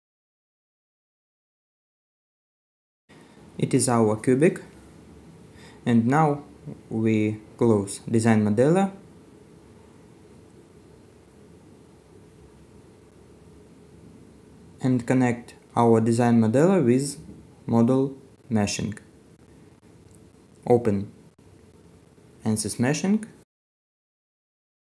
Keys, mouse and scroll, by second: 0.6 middle click, 1.1-1.4 scroll down 1, 4.2-4.5 scroll up 1, 6.0 middle click, 6.7 right click, 7.6 scroll up 1.